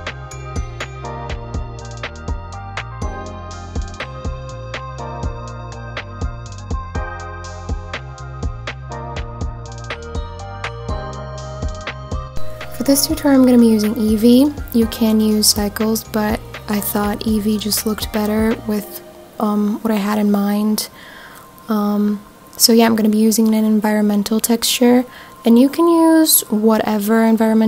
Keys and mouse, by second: 1.2 click, 1.8 r, 1.9 z, 6.6 click, 7.3 click, 12.5-14.1 drag, 14.9 click, 16.5 click, 17.0-19.2 drag, 23.2 click, 23.9-26.0 drag.